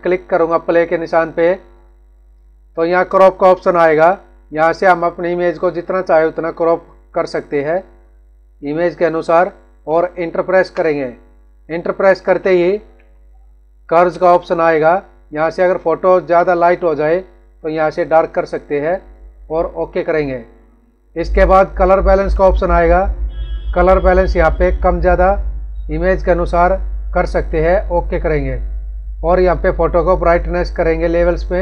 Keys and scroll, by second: 12.1 ctrl+=, 13.7 ctrl+-.